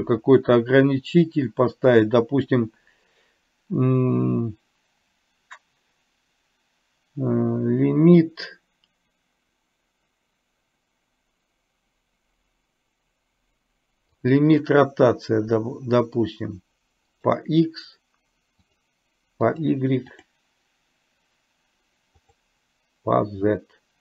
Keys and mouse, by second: 2.0-14.5 drag, 17.1 click, 18.8 drag, 19.5 click, 20.3 click, 22.4 click.